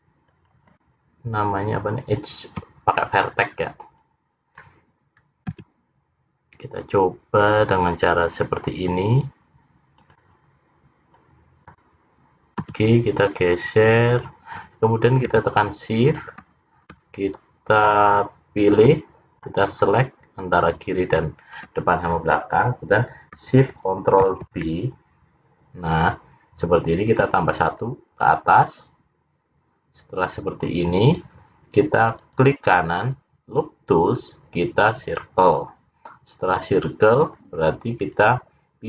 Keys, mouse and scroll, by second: 4.1 click, 5.7 g, 11.2 click, 12.7 g, 15.7 shift+click, 17.4 shift+click, 18.9 shift+click, 20.7 shift+click, 24.4 ctrl+shift+b, 32.3 right click, 38.3 click.